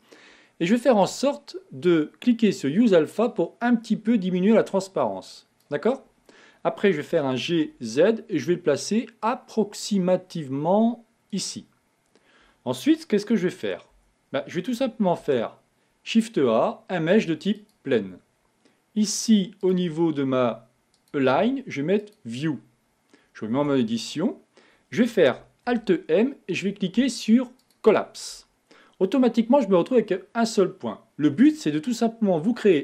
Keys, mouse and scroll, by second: 2.8 click, 3.5-6.6 drag, 7.8 g, 14.3 Tab, 15.5 shift+a, 20.0 click, 21.2-23.9 drag, 23.9 Tab.